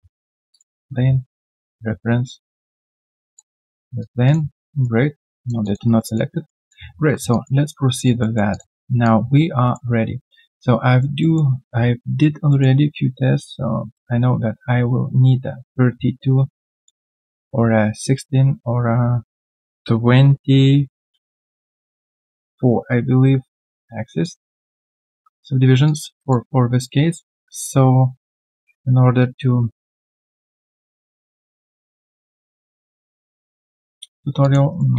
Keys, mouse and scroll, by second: 2.6 double click, 3.3 alt+click, 4.2 double click, 4.6 alt+right click, 5.6 alt+click, 5.8 alt+right click, 6.0 alt+click, 6.6 alt+right click, 7.3 alt+click, 7.9 alt+right click, 8.2 alt+middle click, 8.5 alt+click, 8.7 alt+right click, 9.0 alt+click, 10.3 alt+click, 10.9 alt+right click, 11.2 alt+middle click, 12.5 alt+middle click, 18.7 right click, 24.2 alt+click, 27.0 right click, 33.3 double click, 34.4 alt+click, 34.7 alt+right click.